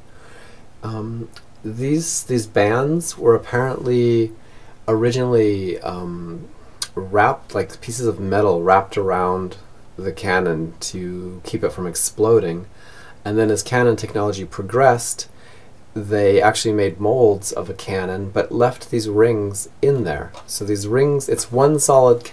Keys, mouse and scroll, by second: 5.9-11.4 middle drag.